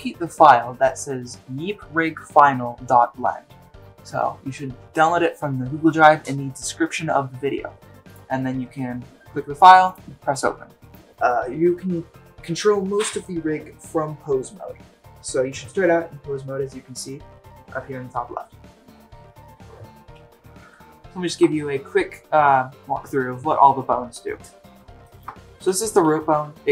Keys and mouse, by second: 25.0 shift+middle drag, 26.6 g.